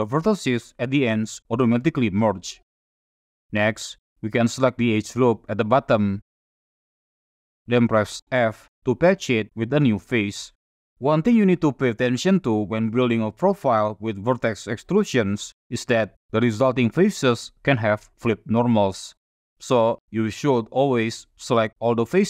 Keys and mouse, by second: 0.2 click, 2.0 click, 4.1 2, 4.5 middle click, 5.5 alt+click, 6.4 shift+middle click, 7.1 click, 8.3 f, 8.8 click, 10.1 middle click, 10.5 shift+middle click, 16.8 F6.